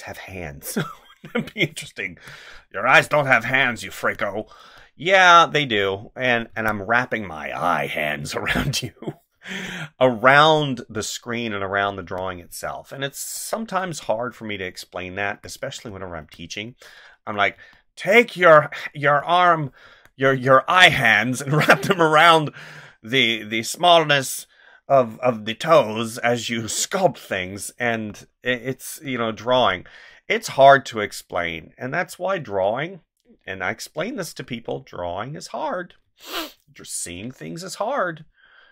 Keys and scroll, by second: 2.0 space, 4.0 space, 6.5 space, 9.3 space, 12.0 space, 13.8 space, 15.3 space, 17.5 space, 19.8 space, 27.8 space, 29.5 space, 36.0 space.